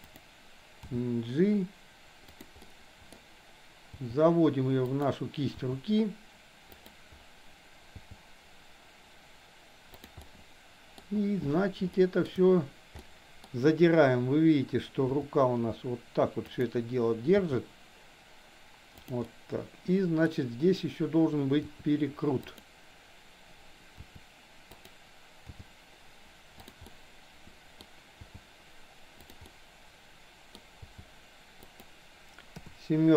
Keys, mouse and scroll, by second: 0.9 g, 2.5 scroll up 1, 2.7-3.0 middle drag, 3.0 scroll down 1, 5.5 r, 7.9 g, 10.2-11.0 middle drag, 11.9-12.3 shift+middle drag, 12.9-13.7 middle drag, 15.2 r, 17.3 g, 19.2-20.3 middle drag, 21.5 r, 24.0 r, 25.4 g, 26.9-27.8 middle drag, 28.0 g, 29.4 scroll up 1, 29.5-30.5 middle drag, 30.8 g, 32.5 KP_7.